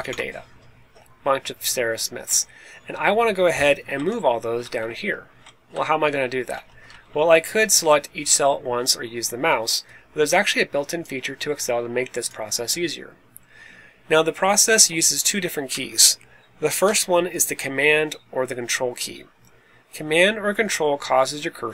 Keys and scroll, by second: 3.9 Left, 4.1 Down, 4.3 Down, 4.4 Down, 4.5 Down, 4.7 Down, 5.2 Right, 5.7 Down, 6.4 Up, 6.8 Up, 7.0 Up, 7.2 Up, 7.3 Up, 7.5 Up.